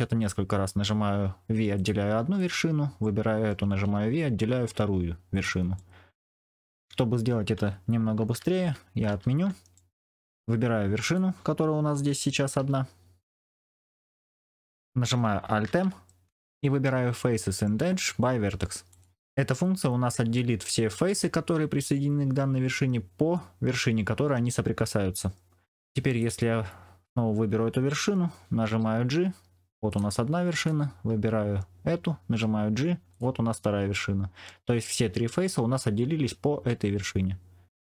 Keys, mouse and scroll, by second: 3.0 middle click, 3.7 v, 5.7 middle click, 8.1 ctrl+z, 8.5 ctrl+z, 9.0 ctrl+z, 9.7 middle click, 12.5 g, 15.6 alt+m, 28.6 g, 32.2 g, 33.8 middle click.